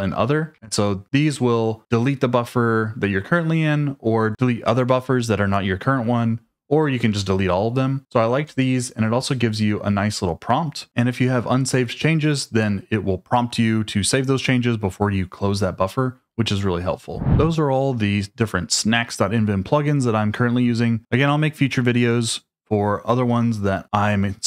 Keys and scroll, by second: 0.5 Escape, 7.0 k, 8.5 j, 10.8 j.